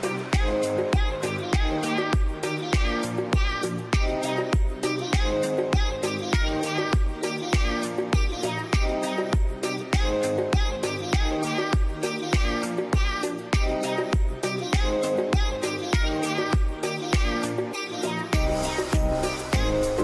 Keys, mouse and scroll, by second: 0.8 scroll up 1, 0.9 middle click, 1.4 scroll up 1, 1.9 scroll down 1, 2.5 scroll up 1, 8.1 q, 8.2-8.9 scroll up 1, 8.9 middle click, 10.8 middle click, 11.3-13.0 scroll up 1, 17.0 double click, 18.1 Tab, 19.6 scroll down 1, 19.9 middle click.